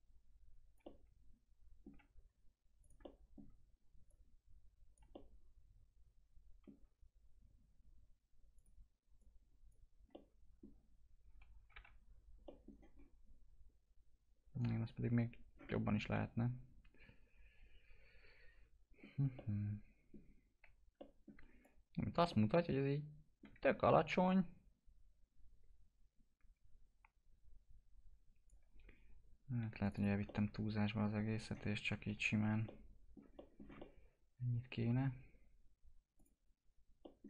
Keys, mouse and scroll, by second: 1.0-2.7 alt+middle drag, 2.7 click, 3.0 alt+middle click, 4.0 click, 5.1-8.5 alt+middle drag, 8.5 click, 10.1 alt+middle click, 11.6 t, 12.4 middle click, 12.9-14.1 scroll up 1, 15.6-20.9 alt+middle drag, 20.9 middle click, 21.6 click, 22.5 alt+middle click, 23.5 w, 24.2 click, 29.5 2, 30.2 click, 30.3-31.9 alt+middle drag, 31.9 ctrl+BackSpace, 32.9 alt+middle click, 33.3 middle click, 33.6 scroll down 1, 33.7 alt+middle click, 35.0-36.1 scroll up 1, 36.1 click, 37.0 middle click.